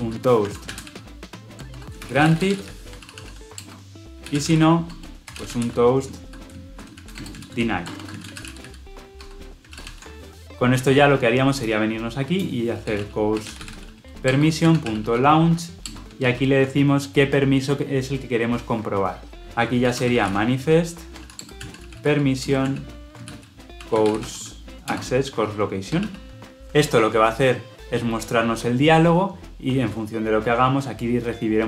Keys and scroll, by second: 9.2 Escape, 9.6 ctrl+alt+l, 9.7 ctrl+alt+o, 16.0 Return, 16.1 ctrl+p, 19.4 ctrl+z, 21.3 Return.